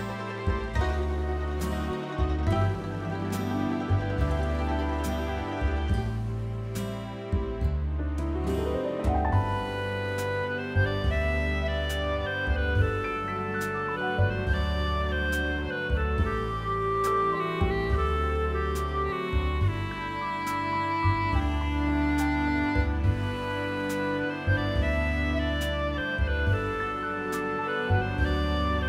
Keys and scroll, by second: 0.0-1.0 typing, 2.5 space, 5.8 Escape, 13.0-14.2 typing, 23.0 space, 24.7 Escape, 24.8-28.8 typing, 28.1 Escape.